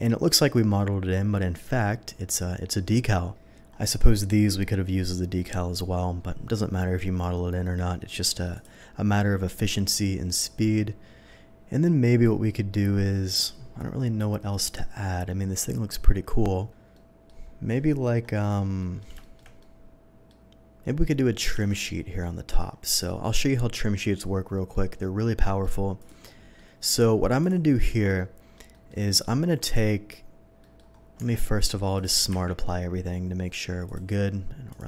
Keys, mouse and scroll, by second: 3.7 scroll up 1, 8.5 click, 15.2 scroll down 1, 16.9-17.3 middle drag, 18.8 middle drag, 19.2 middle click, 19.6-20.3 middle drag, 21.5 z, 22.2 middle click, 23.1 middle click, 24.7 middle drag, 25.3 middle drag, 26.0 click, 26.3 middle drag, 27.4 click, 28.0 Tab, 28.1 middle click, 28.7 middle click, 29.0 middle click, 29.6 middle click, 30.6 middle click, 31.1 middle click, 31.4 Tab, 31.9 click, 32.3 q, 33.8 click.